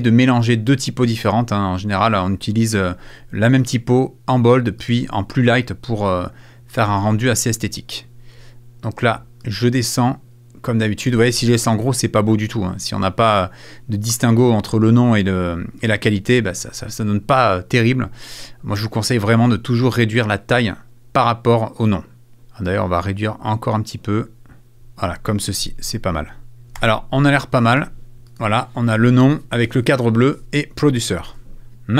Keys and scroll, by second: 26.8 super+f, 31.3 super+s.